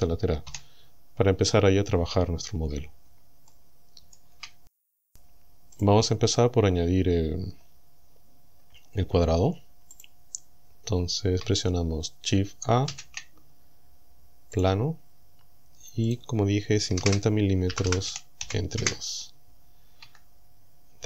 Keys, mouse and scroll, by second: 0.5 KP_7, 3.5 shift+middle click, 3.7 shift+click, 5.8 click, 10.0 click, 12.9 shift+a, 14.6 click, 16.1 click, 16.9 KP_5, 17.1 KP_0, 17.7 m, 18.1 KP_Divide, 18.5 KP_2, 18.8 KP_Enter, 20.1 Tab.